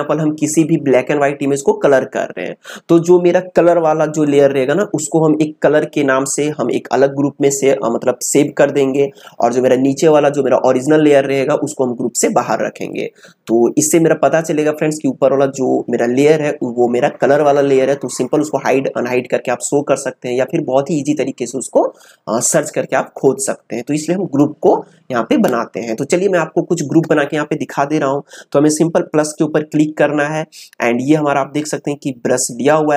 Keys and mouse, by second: 29.2 click.